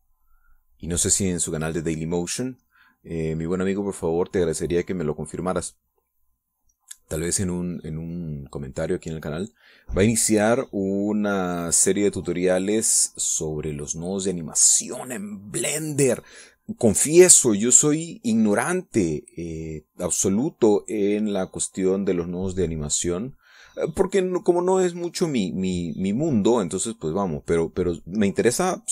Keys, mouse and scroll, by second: 9.7-15.8 drag, 21.1-28.9 drag.